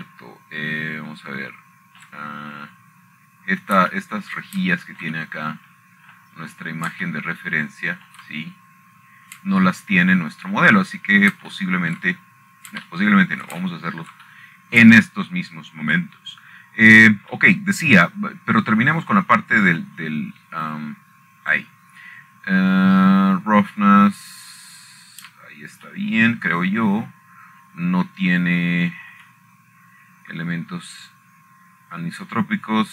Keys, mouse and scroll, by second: 0.8 shift+middle click, 4.8-6.1 shift+middle drag, 5.0-6.1 scroll down 1, 7.0 shift+middle click, 7.8 shift+middle click, 8.0 middle click, 8.9 middle click, 9.3-10.2 scroll up 1, 10.8-12.1 shift+middle drag, 11.2-12.1 scroll up 2, 12.5-13.3 scroll down 5, 14.1 shift+middle click, 14.7 shift+middle click, 14.9-16.1 scroll up 1, 16.3 shift+middle click, 16.8 shift+middle click, 17.6 middle click, 18.6-19.7 shift+middle drag, 22.6 middle click, 23.4-24.6 drag, 28.6 shift+middle click, 31.7-32.9 shift+middle drag.